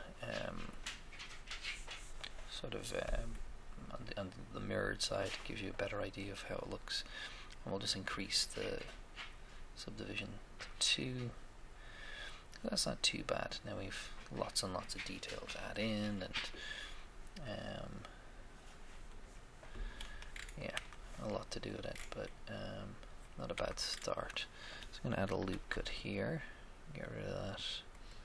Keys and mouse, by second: 0.7-2.3 middle drag, 3.4 middle click, 8.1-10.0 drag, 9.4-11.0 middle drag, 17.5-19.3 middle drag, 20.3 middle click, 20.7 Tab, 20.9 Tab, 23.5 Tab, 23.5 Tab, 24.0-25.5 middle drag, 25.4 ctrl+r, 25.5 ctrl+r.